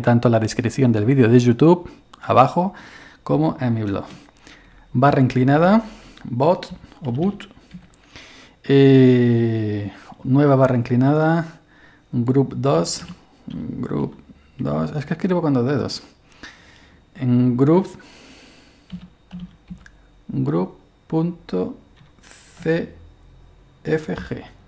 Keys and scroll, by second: 4.7 space, 6.7-8.2 typing, 10.5 /, 12.8-14.6 typing, 16.6 typing, 18.9-19.7 typing, 22.0-22.6 typing, 23.9 typing.